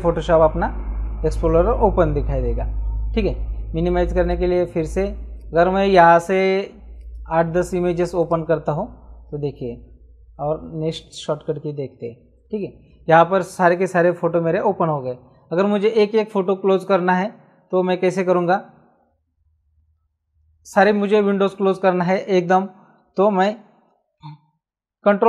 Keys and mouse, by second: 4.1 click, 5.3 click, 6.9 ctrl+shift+click, 8.2 click.